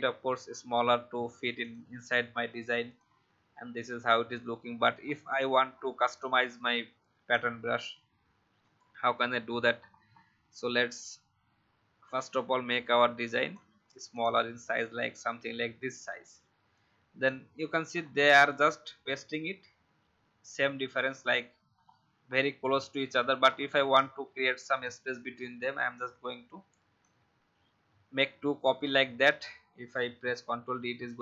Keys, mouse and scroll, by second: 1.5 click, 5.0 alt+scroll down 1, 6.1 click, 9.6 alt+scroll up 1, 12.0-13.6 shift+drag, 14.1 click, 17.9 alt+scroll up 1, 21.7-22.1 alt+scroll down 1, 23.4 alt+scroll up 1, 24.8-27.0 alt+drag, 28.6-28.9 alt+scroll down 1, 30.3 ctrl+d, 30.6 ctrl+d, 30.9 ctrl+d.